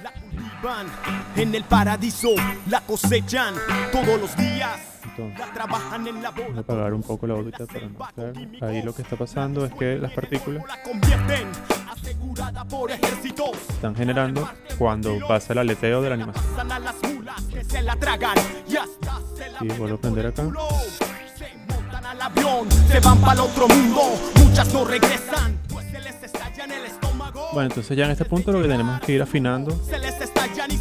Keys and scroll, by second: 11.9 0, 17.4 0, 18.9 space, 21.3 0, 25.8 0, 28.6 space.